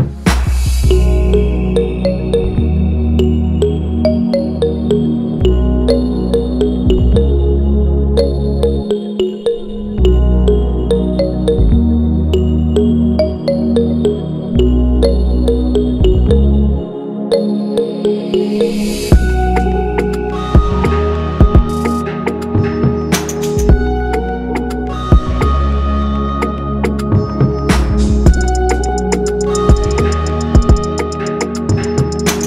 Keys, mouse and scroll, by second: 1.1 scroll down 1, 1.4 click, 2.4-3.7 drag, 4.3 click, 5.9-6.3 scroll down 1, 6.3-9.2 drag, 9.8 a, 11.5-12.2 scroll up 1, 12.2 click, 12.5 scroll down 2, 12.8 click, 13.9 ctrl+a, 14.5 click, 15.2 ctrl+l, 16.6 p, 18.2-20.1 drag, 20.5 click, 21.9-22.9 right drag, 22.9-24.7 drag, 25.4 click, 25.9 click, 26.7 click, 27.6 click, 28.3 click, 29.0 click, 30.0 click, 30.6 click.